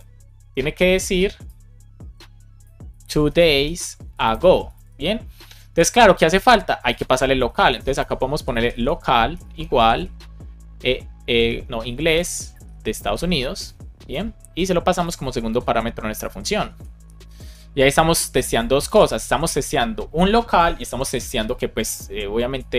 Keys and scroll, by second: 3.1 space, 3.8 space, 4.6 super+s, 7.3 Return, 7.9 space, 9.2 space, 9.8 space, 11.2 BackSpace, 12.5 shift+u, 12.9 shift+s, 13.5 Right, 15.4 super+c, 16.6 Left, 17.3 super+v, 18.7 space, 19.0 super+s.